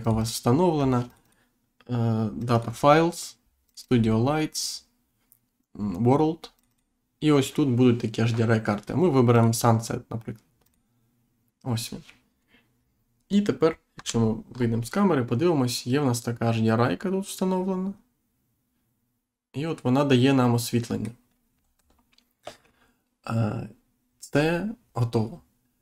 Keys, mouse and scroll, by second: 0.0 click, 1.0 click, 2.3 click, 3.6 click, 6.5 click, 9.3 click, 10.6 click, 13.9 Insert, 14.5 scroll down 1, 14.9 middle click, 21.7 Insert.